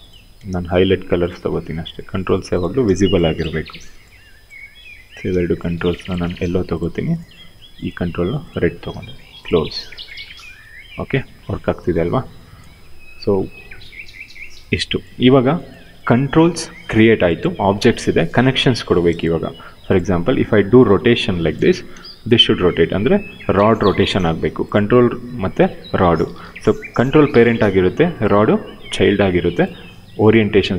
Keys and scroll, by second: 19.7 e, 21.3 ctrl+z, 21.6 q.